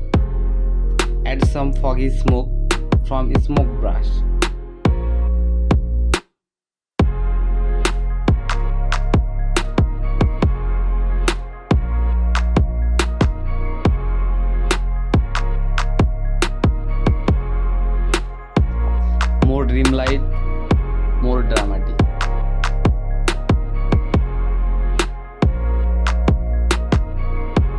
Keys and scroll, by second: 0.6 ], 1.7 [, 2.1 [, 3.3 [, 5.4 ], 6.8 ], 8.2 ctrl+z, 8.7 [, 8.9 ], 10.9 [, 11.4 ], 11.8 [, 12.0 ], 12.8 ctrl+z, 13.3 ctrl+space, 15.4 ctrl+z, 17.0 space, 20.1 Return, 21.4-23.3 typing, 21.9 ctrl+i, 23.9 ctrl+z, 25.6 ctrl+z, 27.7 x.